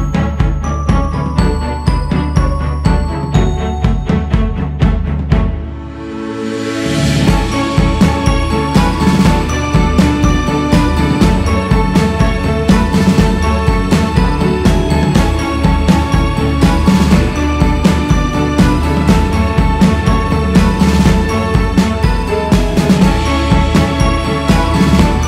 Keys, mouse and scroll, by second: 0.5-1.7 scroll up 4, 2.2-5.2 drag, 7.0-7.5 scroll down 4, 8.5 click, 10.5 click, 11.1-12.0 scroll up 3, 12.0 scroll down 3, 12.4-13.7 scroll up 5, 13.7-16.5 drag, 16.5-17.7 scroll down 7, 18.2 click, 20.5 click, 21.1 scroll up 2, 22.5 f, 24.9 g.